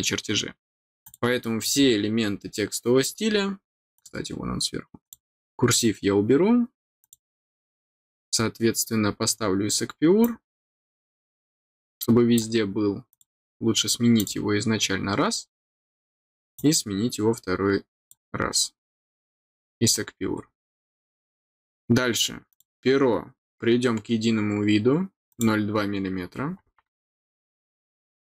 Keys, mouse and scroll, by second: 1.0 click, 3.9 click, 5.0 click, 7.0 click, 9.3 scroll down 1, 10.2-12.3 drag, 13.1 click, 14.1 click, 16.5-18.0 drag, 18.7 click, 20.4 scroll down 1, 22.4 click, 25.2 click.